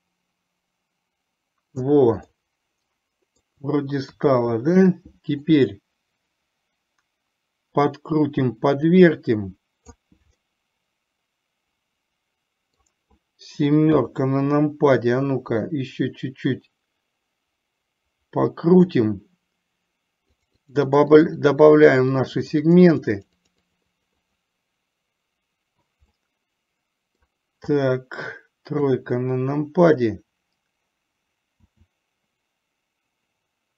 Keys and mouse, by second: 2.4-3.5 middle drag, 4.3 KP_3, 5.4-10.2 drag, 10.5-12.9 middle drag, 14.0 KP_7, 15.9-19.0 drag, 20.7 click, 20.9 click, 21.3 click, 21.5 click, 22.3-24.5 drag, 26.2-27.3 middle drag, 28.9 KP_3, 31.8 s.